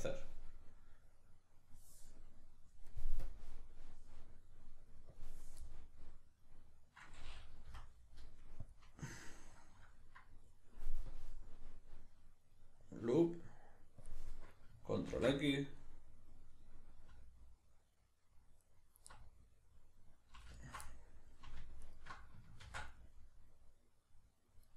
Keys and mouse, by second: 3.2-5.7 drag, 5.7-11.1 middle drag, 7.7 F9, 11.1-15.8 drag, 15.8-18.6 middle drag, 18.6 alt+right click, 19.2-20.6 middle drag, 20.6 alt+shift+right click, 20.9 middle click, 21.8 alt+shift+right click, 22.6 ctrl+x, 23.0-24.7 middle drag.